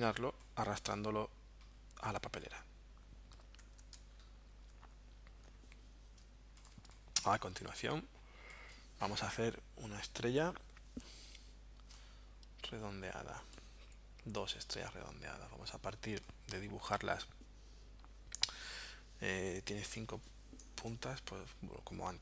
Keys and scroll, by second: 3.6 super+z, 6.8 space, 20.8 BackSpace.